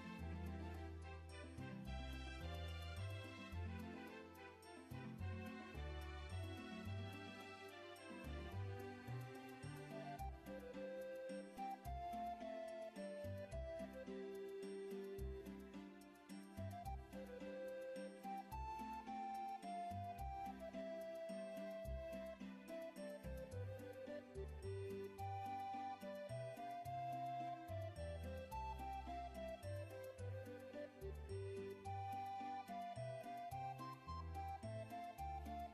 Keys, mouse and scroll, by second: 0.6-1.1 ctrl+alt+scroll down 1, 3.5 click, 4.2 click, 7.3 click, 11.7 alt+click, 13.1 click, 15.5 click, 17.4 alt+click, 19.5 ctrl+click, 21.0 click, 21.8 click, 23.4 alt+click, 25.5 click, 26.6 ctrl+click, 30.3 click, 31.6 click, 33.2 alt+click, 33.7 click, 35.3 alt+click.